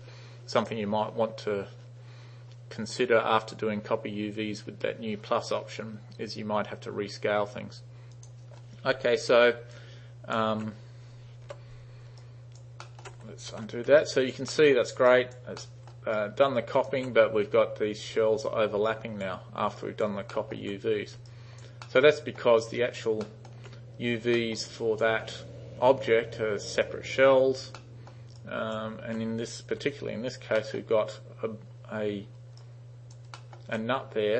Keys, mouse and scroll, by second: 8.2 click, 9.8-10.4 alt+drag, 11.5 u, 12.2 alt+right click, 12.9 alt+middle click, 13.6 ctrl+z, 14.0 alt+right click, 14.6 alt+middle click, 15.1 alt+right click, 15.6-16.0 alt+middle drag, 16.2-16.9 alt+right drag, 18.9 alt+right click, 19.8 alt+right click, 20.4 alt+middle click, 21.3 alt+right click, 21.9-22.4 alt+middle drag, 22.6 alt+right click, 23.3 alt+middle click, 24.4 alt+middle click, 24.7 alt+right click, 27.9 alt+middle drag, 28.5 alt+right click, 29.8 3, 30.7 alt+middle drag, 32.7-33.2 alt+right drag, 33.4 alt+middle click.